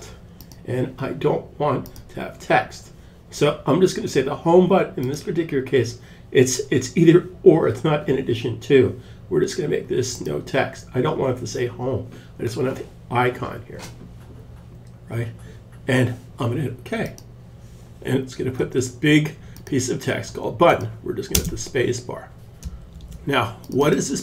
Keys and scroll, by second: 20.7 super+s, 22.3 super+s.